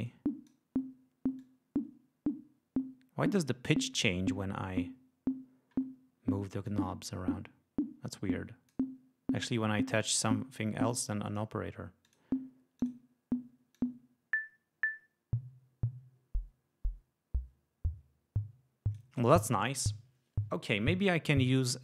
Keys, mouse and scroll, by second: 1.3-3.4 drag, 6.5-8.8 drag, 11.2 click, 11.9 click, 12.7 click, 13.6-19.0 drag.